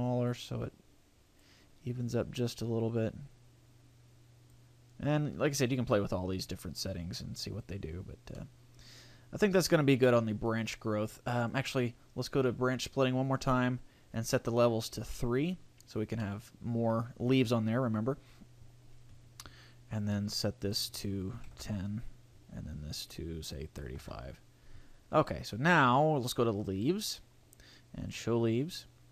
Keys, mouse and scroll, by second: 2.0 click, 6.4 click, 8.3 middle click, 10.9-11.5 scroll up 2, 11.5 click, 11.5-12.6 scroll up 2, 14.8 click, 16.2 middle click, 20.6 click, 22.9 click, 25.5 click, 28.6 click.